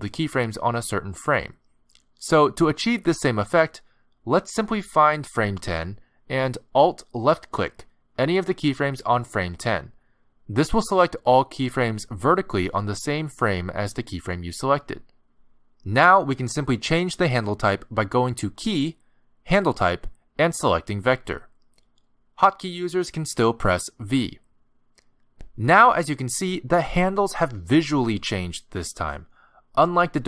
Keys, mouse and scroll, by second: 0.4 click, 2.4 click, 3.1 a, 3.8 ctrl+Tab, 7.7 alt+click, 10.9 click, 17.5 click, 23.9 v, 27.8-28.2 scroll up 4, 28.2 middle click, 28.9 a, 29.1-30.2 scroll down 1.